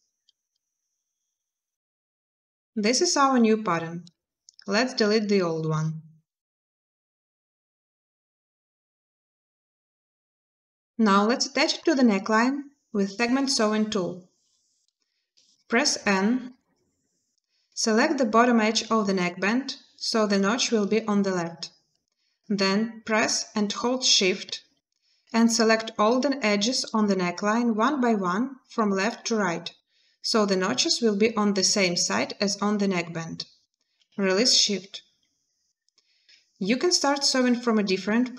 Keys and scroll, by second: 2.5 a, 6.1 Delete, 16.3 n.